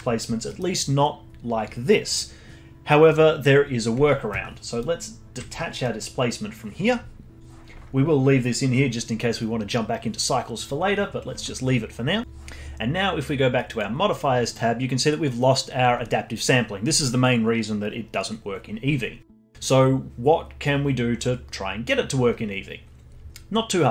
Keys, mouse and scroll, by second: 4.8 ctrl+right click, 5.8-7.4 middle drag, 13.7 click, 21.1-23.9 scroll up 5.